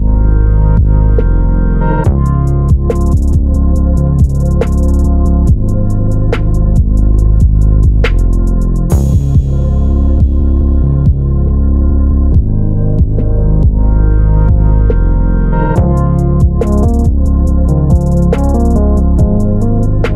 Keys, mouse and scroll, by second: 3.8 click, 4.1 g, 5.3 click, 5.5 KP_Decimal, 6.5 r, 7.2 Escape, 7.7 r, 8.5 Escape, 8.6 r, 11.9 click, 12.1-12.4 scroll down 1, 12.4-14.8 middle drag, 13.3-15.5 typing, 14.9 scroll up 1, 18.5 click, 18.7 middle click, 19.0 scroll down 1, 19.4 shift+z, 19.7-20.0 scroll down 1.